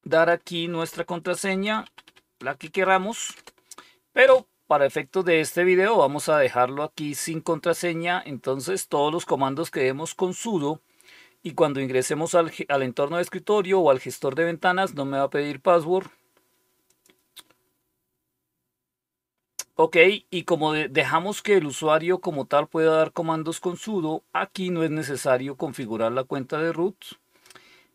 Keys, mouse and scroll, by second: 0.1 click, 1.2-3.2 typing, 6.1 click, 16.8 click.